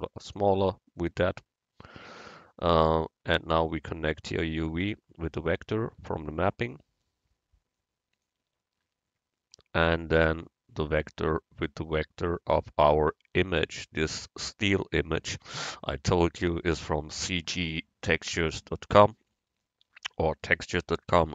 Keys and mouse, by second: 4.2-6.0 drag, 7.8-10.2 drag, 11.1-13.0 drag.